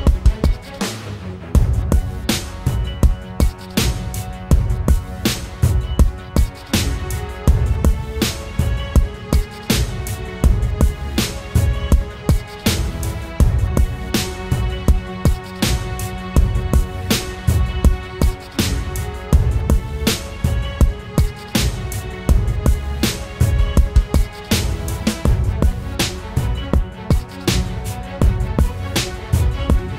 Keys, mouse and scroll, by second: 1.2-1.8 scroll up 1, 1.8 scroll down 1, 1.9-2.4 scroll up 1, 10.2 ctrl+t, 14.6 alt+shift+click, 21.3 ctrl+t, 22.2 alt+shift+click, 28.2 Return, 28.7 Down.